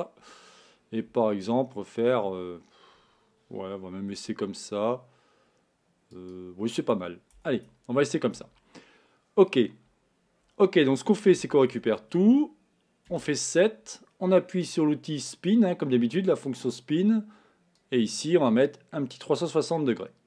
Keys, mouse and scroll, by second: 15.5-17.9 drag.